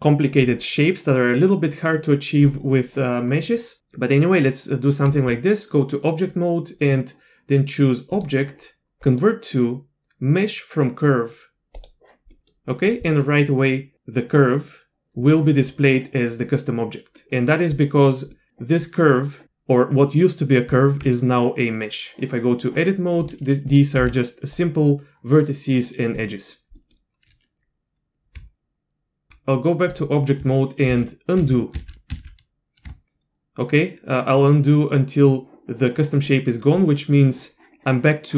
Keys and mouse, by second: 3.8 click, 5.1 Tab, 8.2-11.8 drag, 12.3 middle click, 13.0 middle click, 13.8 middle click, 14.2 middle drag, 16.7 middle click, 18.3 middle click, 20.7 Tab, 23.2 click, 23.7 click, 24.0 g, 26.2 click, 26.7 click, 28.3 Tab, 29.3 Tab, 30.9 ctrl+z, 31.4 ctrl+z, 31.7 ctrl+z, 32.1 ctrl+z, 36.8 middle click.